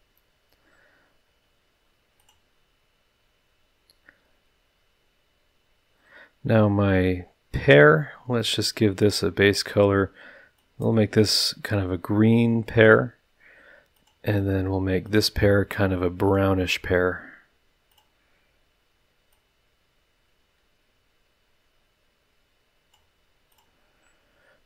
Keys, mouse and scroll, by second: 2.2 click, 8.9 click, 10.5-13.0 drag, 13.9 click, 15.0 click, 16.2 drag, 17.9 click, 19.3-23.1 drag, 23.5 click.